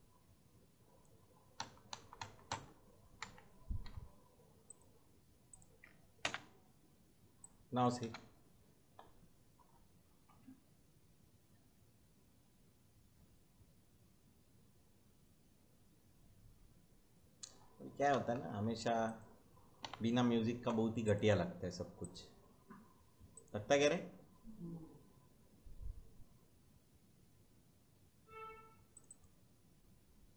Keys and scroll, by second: 1.5 Right, 3.1 Left, 3.8 Right, 6.2 ctrl+v, 7.9 space, 18.1 space, 19.8 Delete.